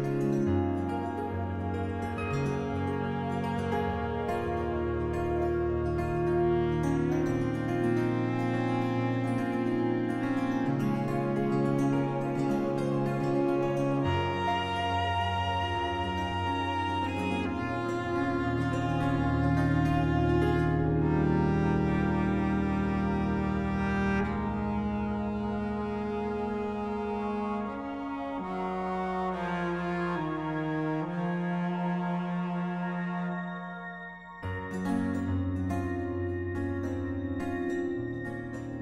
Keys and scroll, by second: 37.3 z.